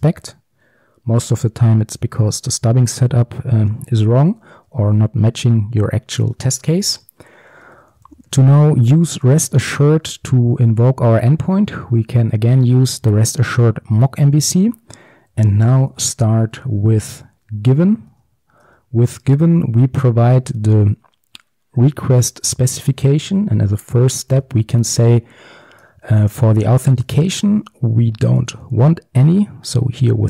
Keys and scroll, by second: 13.6 Return, 18.2 Return, 19.3 Tab, 25.9 Return.